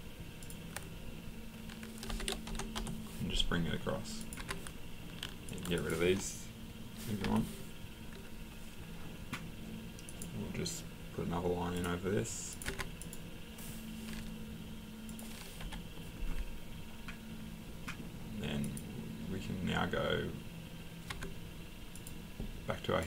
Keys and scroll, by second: 2.1-2.8 typing, 4.4 Escape, 5.3 typing, 7.2 Delete, 12.7 Escape, 15.6 Delete, 21.1 Escape.